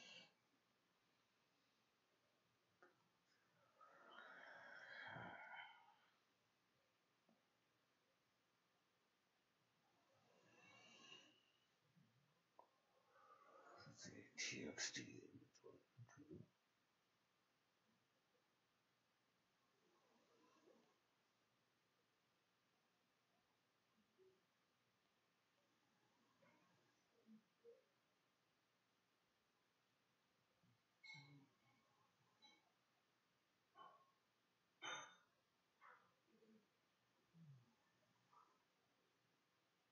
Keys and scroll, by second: 20.1-25.8 typing, 20.3 Return, 28.5-32.0 typing, 35.6 Tab, 39.3-39.9 typing.